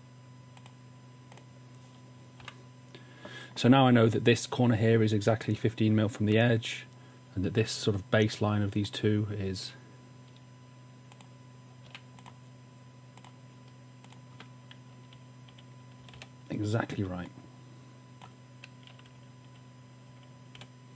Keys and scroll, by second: 2.5 w, 11.9 a, 15.2 Up, 15.5 Up, 16.0 typing, 19.3 Up, 20.0 Up, 20.5 typing.